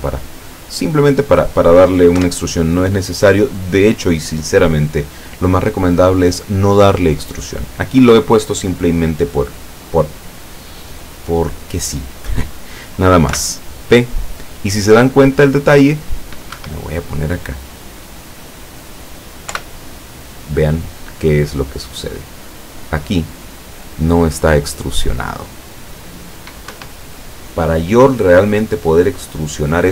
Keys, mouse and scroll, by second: 0.5-1.5 middle drag, 2.2 KP_7, 13.4 p, 16.6 Escape, 17.3-18.8 middle drag, 19.6 p, 26.8 Escape.